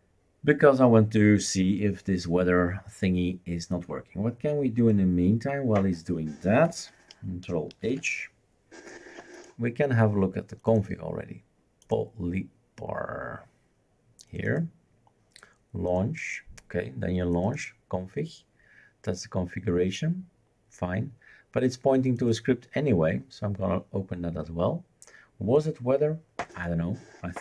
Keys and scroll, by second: 7.9 ctrl+h.